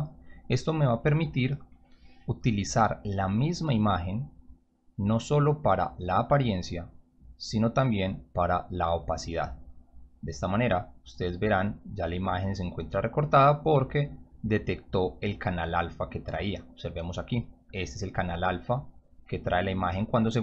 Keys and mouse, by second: 0.0 click, 1.6 click, 1.8 click, 3.4-4.2 drag, 7.6-9.3 drag, 13.0-13.8 drag, 16.3 click, 17.4 click.